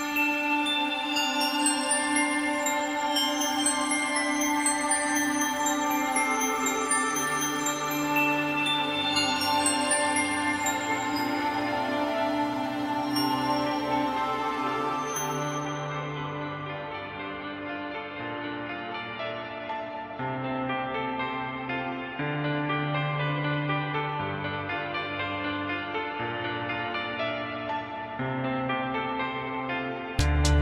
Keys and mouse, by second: 0.8 click, 1.6 click, 2.6 click, 3.4 shift+middle click, 3.6 f, 5.0 click, 6.6 click, 7.8 shift+middle click, 8.1 click, 9.9 ctrl+click, 10.8 click, 12.1 click, 12.3 shift+middle click, 12.7 click, 12.9 shift+middle click, 13.0 click, 13.8 shift+middle click, 14.0 click, 14.6 shift+middle click, 14.7 click, 15.0 shift+middle click, 15.3 ctrl+click, 17.5 shift+middle click, 17.6 click, 17.8 shift+middle click, 18.0 click, 18.8 ctrl+click, 19.0 shift+middle click, 19.2 ctrl+click, 19.4 shift+middle click, 19.7 ctrl+click, 20.0 shift+middle click, 20.4 ctrl+click, 21.0 ctrl+click, 21.8 shift+middle click, 21.9 click, 22.2 shift+middle click, 22.4 ctrl+click, 22.8 shift+middle click, 23.1 ctrl+click, 23.4 ctrl+click, 24.0 shift+middle click, 24.2 click, 24.7 ctrl+click, 25.2 click, 25.8 f, 25.9 click, 26.0 shift+middle click, 26.4 click, 28.8 click, 30.2 ctrl+click, 30.4 click.